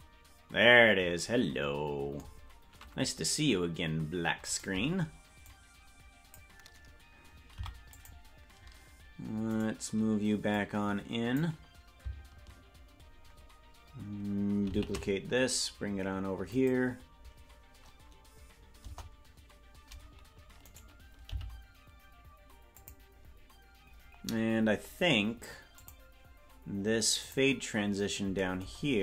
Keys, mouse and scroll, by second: 4.5 right click, 5.5-6.5 drag, 7.5 i, 9.6 right click, 10.6 click, 14.7 shift+d, 18.8 KP_0, 20.6 right click, 21.3 g, 23.4-25.6 scroll up 3, 25.7 click, 27.2 click, 28.8-29.0 scroll down 1.